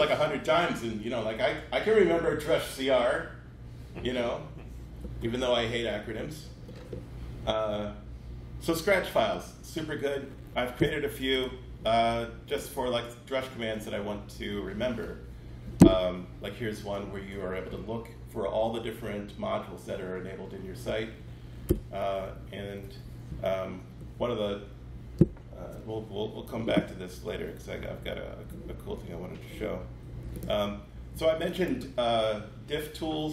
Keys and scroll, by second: 21.6 Return, 22.2 Caps_Lock.